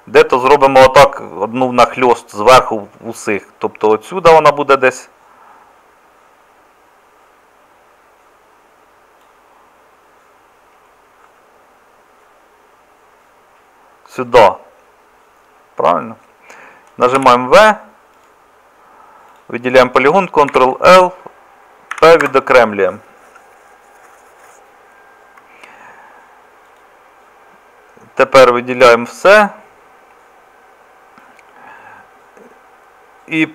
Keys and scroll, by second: 17.2 v, 20.5 ctrl+l, 21.9 p, 28.9 a.